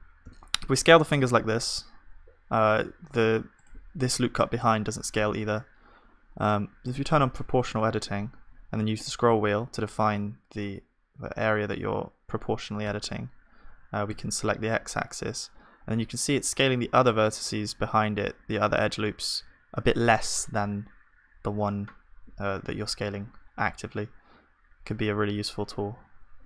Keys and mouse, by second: 1.4 s, 7.6-8.9 drag, 7.6 s.